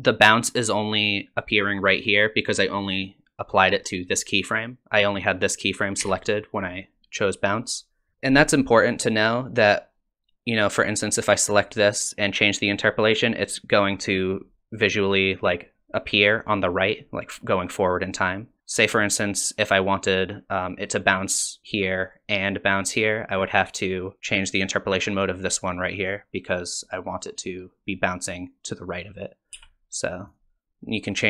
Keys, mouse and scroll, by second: 4.0 click, 6.0 t, 11.5 click, 19.0 click, 24.2 click, 29.5 t, 30.6 click.